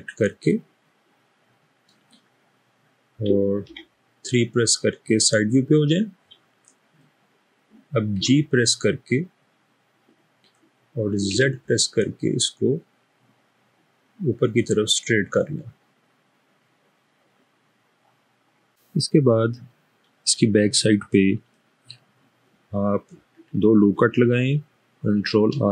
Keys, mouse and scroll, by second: 0.7-1.9 middle drag, 3.8 3, 8.2 typing, 11.3 typing, 19.9-22.0 scroll up 1, 25.5 ctrl+r.